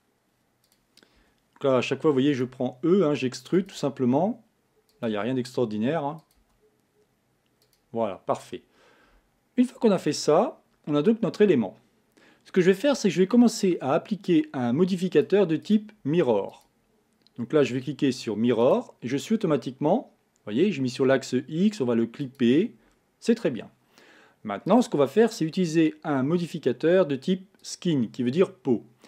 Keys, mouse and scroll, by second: 0.7 click, 1.2 e, 2.5 e, 3.7 e, 5.2 e, 6.4 e, 10.0 Tab, 11.2-11.6 scroll down 3, 11.6-13.2 scroll up 3, 14.3-15.7 drag, 16.5-19.5 drag, 22.2 click, 24.7-27.7 drag.